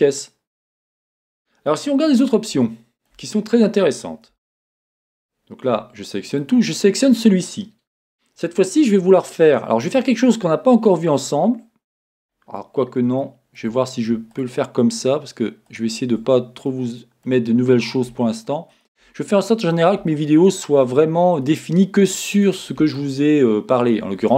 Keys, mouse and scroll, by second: 2.6 scroll up 2, 4.3 Tab, 5.6 a, 6.3 click, 12.2-13.2 scroll down 1, 13.2-14.3 shift+middle drag, 14.3 shift+click, 15.6 shift+click, 16.6-18.7 middle drag, 18.7 shift+click, 19.3-24.3 middle drag, 21.0-21.4 scroll down 2.